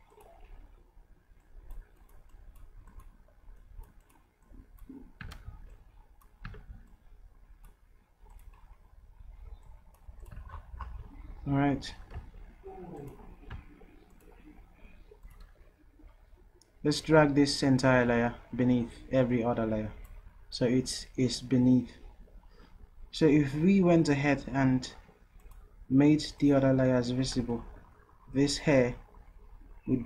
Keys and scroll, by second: 5.3 ctrl+z, 6.6 ctrl+z.